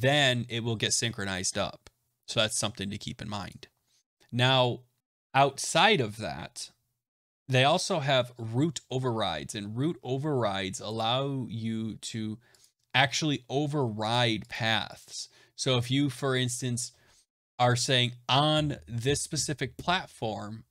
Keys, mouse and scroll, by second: 7.2 scroll, 10.9 click, 12.5 click, 14.0 click, 14.4 click, 14.9 click.